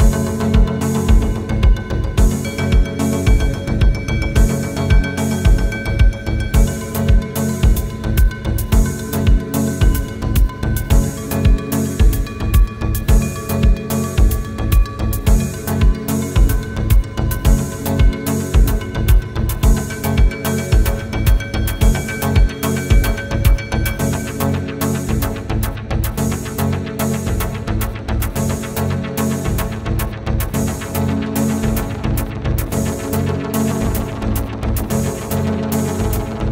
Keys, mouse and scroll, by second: 0.0 middle click, 0.3 scroll down 1, 0.7 scroll up 1, 0.9 scroll down 1, 1.4 middle click, 2.1 scroll down 1, 2.5-2.8 scroll up 1, 3.3 scroll down 1, 4.3 Right, 5.8 scroll up 1, 8.5 scroll down 1, 8.7 scroll up 1, 9.4 Right, 10.5 scroll up 1, 10.8 scroll down 1, 11.3 Escape, 11.9 Right, 12.1-13.2 scroll down 1, 13.2 scroll down 1, 14.9-15.3 scroll down 1, 17.7 /, 17.9 Return, 18.4 Return, 20.4 typing, 20.8 Return, 22.0 scroll down 1, 22.4 space, 22.5 middle click, 22.9 scroll down 1, 23.4 scroll up 1, 24.4 scroll down 1, 25.2 middle click, 26.5 scroll up 1, 26.7 middle click, 27.0 scroll up 1, 27.7 shift+click, 28.1 right click, 29.3 typing, 30.2 scroll down 1, 31.0 scroll up 1, 31.5 typing, 32.7 scroll down 1, 32.9 middle click, 33.2 space, 33.5 scroll down 1, 33.7 middle click, 34.0 scroll up 1, 34.5 double click, 35.7 p.